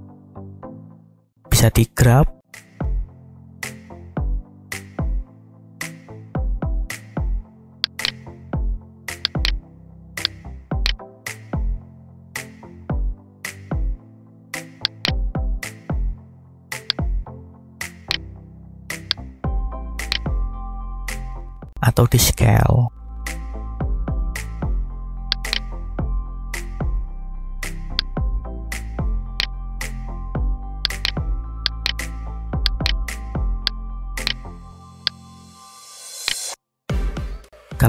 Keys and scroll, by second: 0.8 g, 12.0 g, 21.2 s, 22.5 y, 27.0 a, 30.0 Tab.